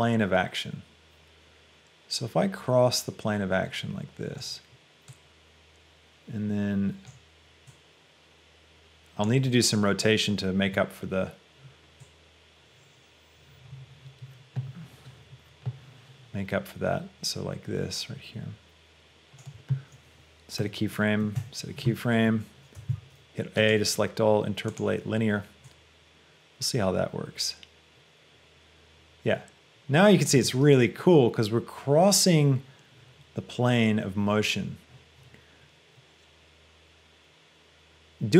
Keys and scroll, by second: 21.6 i, 23.0 a, 30.3 space.